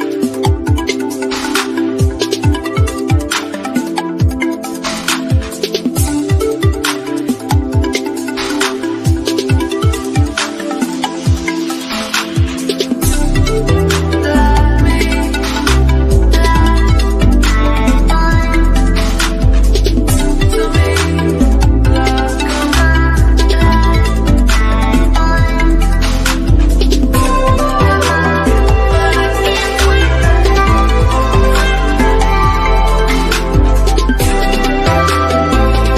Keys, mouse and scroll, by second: 1.2 scroll down 1, 1.7 shift+middle click, 2.9-3.3 scroll up 1, 3.6-5.6 middle drag, 5.6 click, 6.9 Down, 9.3 click, 11.9 Down, 15.2 click, 15.9-18.5 shift+middle drag, 18.5 click, 21.7 scroll up 1, 22.8 click, 23.1 Down, 24.2 click, 27.1 Down, 28.7 click, 30.1-30.7 scroll down 1, 30.9-32.3 shift+middle drag, 32.3 Left, 34.0 Right, 34.4 Down, 35.4 click, 35.7-35.9 scroll down 1.